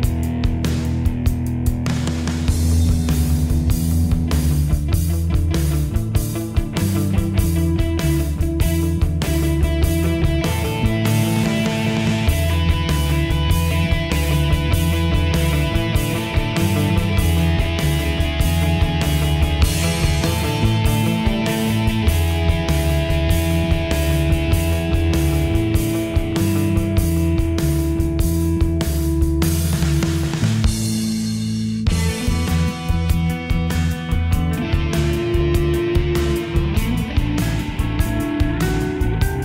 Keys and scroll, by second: 25.2 ctrl+g.